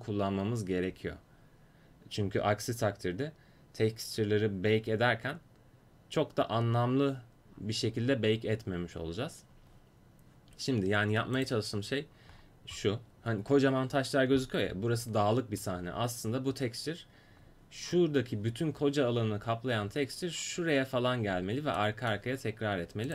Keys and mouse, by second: 11.4-14.4 drag, 17.9-21.4 middle drag, 23.0 click.